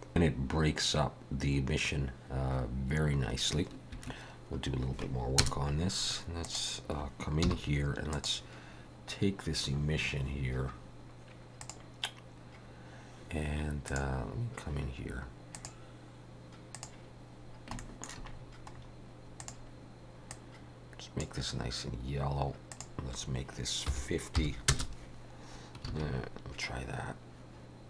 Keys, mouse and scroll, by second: 5.4 KP_0, 6.4 click, 7.5 h, 8.1 click, 9.7-10.8 scroll up 12, 11.6 click.